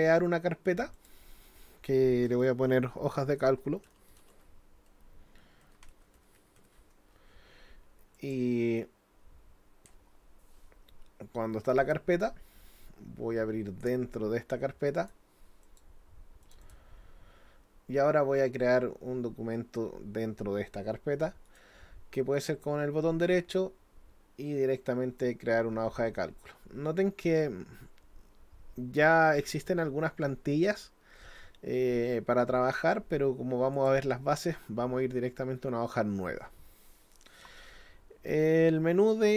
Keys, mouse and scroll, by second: 1.0 click, 8.2 click, 15.0 click, 15.6 click, 16.4 click, 16.6 click, 21.5 right click, 33.7 click.